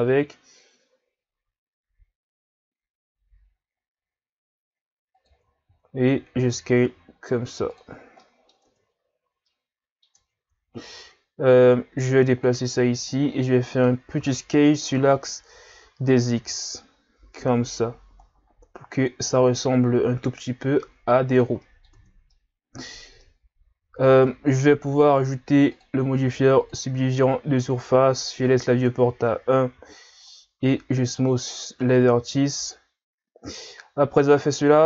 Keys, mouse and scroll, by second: 5.7 s, 8.0 scroll down 3, 8.2 scroll up 1, 8.3 middle click, 8.6 Tab, 9.5 middle click, 10.2 Tab, 10.9 click, 12.7-13.1 scroll up 4, 13.1-14.2 middle drag, 14.2 s, 21.6 middle click, 21.9 Tab, 22.3-23.4 middle drag, 23.4-24.1 scroll down 2, 24.1 middle click, 24.6-25.7 scroll up 2, 25.7 click, 28.5 w, 30.2 click, 30.6 w, 31.5-34.6 middle drag, 34.6-34.8 scroll down 1.